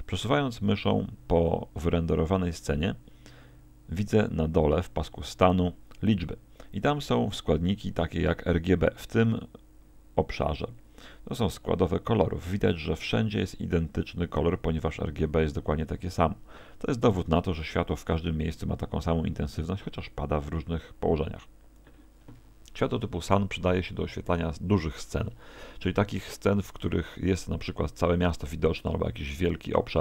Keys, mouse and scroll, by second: 22.4 Escape.